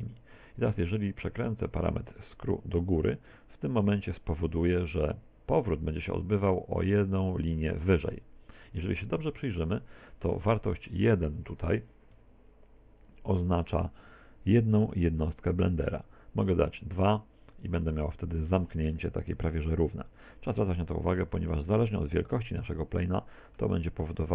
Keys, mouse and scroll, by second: 2.2 click, 9.2-9.5 scroll down 3, 9.5 middle click, 10.4 middle click, 11.8 click, 14.0 middle click, 17.4 click, 19.9 middle click, 22.7 middle click, 23.9 s.